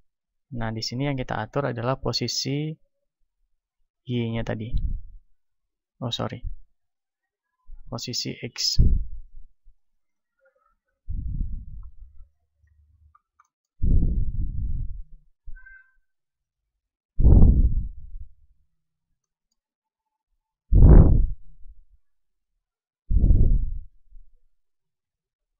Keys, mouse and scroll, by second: 5.0-25.5 drag, 14.4 middle click, 19.1-21.2 middle drag.